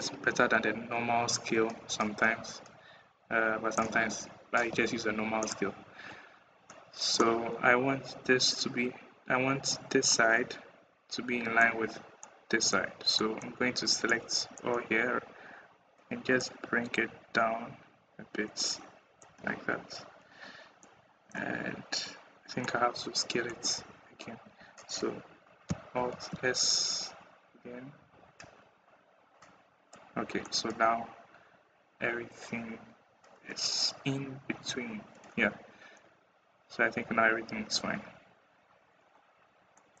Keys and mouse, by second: 0.8 middle click, 1.0 middle click, 3.1 middle click, 6.5 click, 9.9-11.4 drag, 12.1 click, 13.0 click, 14.1 click, 14.4-16.6 middle drag, 19.0-19.7 middle drag, 19.1 Tab, 20.7 click, 22.4 click, 23.1 middle click, 23.6 Tab, 23.6 middle click, 24.3 a, 25.8 alt+s, 28.2 Tab, 30.3 click, 30.4 click, 30.7 click, 31.4 middle click, 32.0 middle click, 32.8-35.4 middle drag, 35.8-38.0 middle drag, 36.8 Tab, 39.7 click.